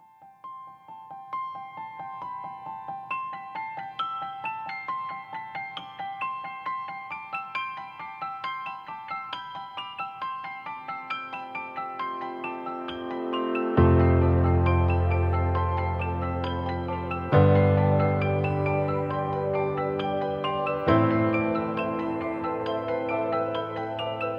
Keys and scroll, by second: 10.9 ctrl+i.